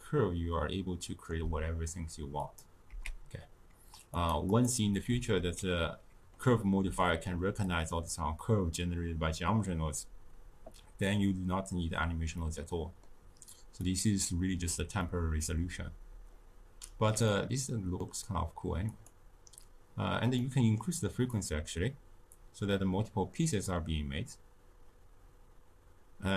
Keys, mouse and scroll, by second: 2.4 click, 2.9 x, 4.2 click, 4.5 click, 5.4 x, 12.4-13.8 middle drag, 13.8-15.0 drag, 15.0-18.8 middle drag, 18.8-20.3 drag, 20.3 middle click, 21.2-24.2 drag.